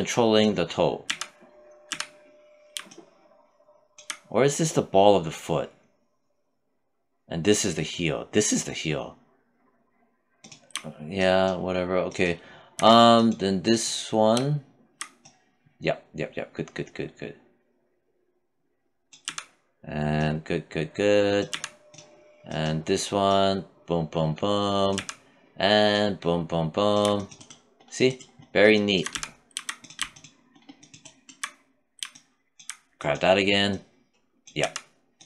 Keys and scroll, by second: 0.3 z, 18.5 z, 20.8 z, 24.2 z, 28.3 z, 33.8 z.